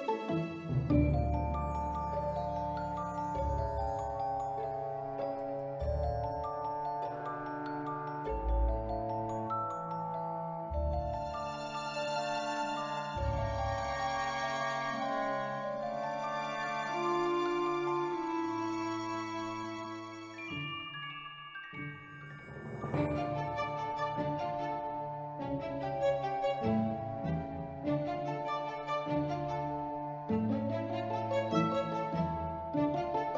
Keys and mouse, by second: 0.3-1.6 drag, 2.5 Tab, 2.8-3.3 ctrl+middle drag, 3.8 click, 5.1 r, 5.3 x, 6.4 click, 6.7 Tab, 7.3 b, 8.0 s, 8.7 click, 9.3 ctrl+r, 9.7 Escape, 10.3-12.1 drag, 12.4 Tab, 13.0-13.5 middle drag, 13.8-14.2 middle drag, 14.8 shift+a, 16.3 s, 17.1 click, 17.5-18.3 middle drag, 18.5 middle drag, 18.9 middle click, 19.2-19.5 middle drag, 21.4 middle drag, 22.0 Tab, 22.3 3, 23.0 click, 23.9 ctrl+r, 25.0 click, 25.2 s, 26.2 click, 26.5 middle click, 27.2 shift+middle click, 27.6 ctrl+middle click, 28.4 shift+middle click, 28.8 ctrl+middle click, 30.1 click, 30.8 s, 31.8 Tab, 32.7 click.